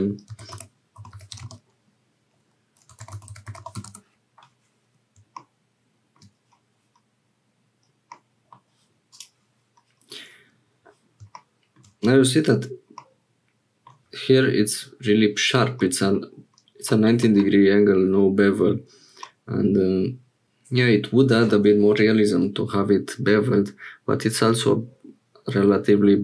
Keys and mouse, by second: 8.1 middle click, 13.0-14.0 middle drag, 15.8 middle click, 16.9 middle click, 19.3-21.5 middle drag.